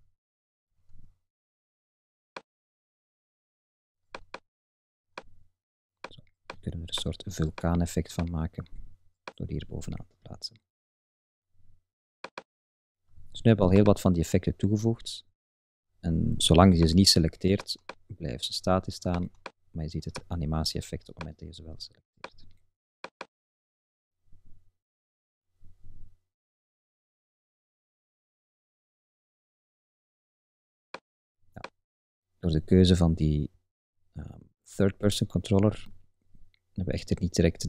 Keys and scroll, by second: 26.8 Up, 27.2 Left, 27.5 Up, 31.7 Up, 33.5 Left, 33.8 Up, 34.1 Left, 34.4 Up, 34.9 Right, 35.2 Up, 35.5 Right, 35.7 Up, 36.4 Left, 36.7 Up, 37.1 Left, 37.2 Up.